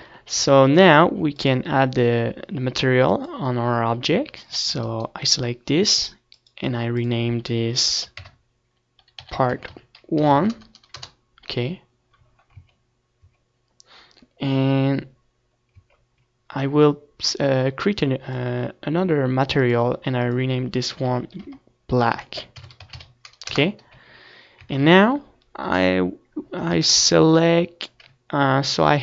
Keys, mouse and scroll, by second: 4.4-6.1 drag, 6.1-12.1 right drag, 7.6-12.1 drag, 12.1-13.7 middle drag, 13.7 Tab, 14.6 Tab, 16.8-19.6 middle drag, 17.1 Tab, 19.6-24.8 drag, 25.2 z, 28.0 a.